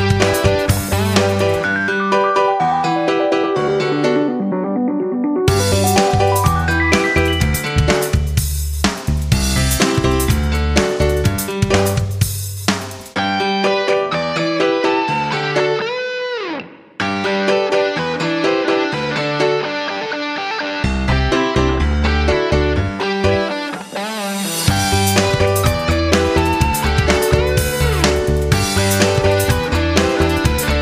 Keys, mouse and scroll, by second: 4.8 Down, 7.3-14.2 drag, 16.2 Down, 16.9 shift+Up, 17.4 shift+Right, 17.9-19.5 typing, 20.5 Left, 20.6 typing, 20.7 Left, 21.5 shift+Left, 22.4-24.7 drag, 25.5 ctrl+g, 28.0 click, 29.3 shift+Down, 29.4 shift+Left, 29.7 shift+Down.